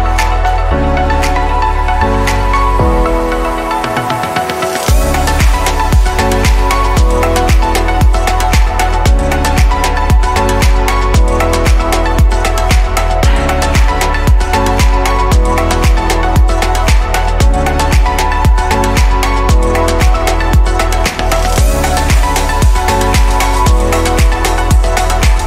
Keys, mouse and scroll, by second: 9.6 click, 12.0 q, 15.3-17.2 middle drag, 17.2 ctrl+s, 17.7-18.5 drag, 18.5-23.2 middle drag, 23.2 ctrl+s.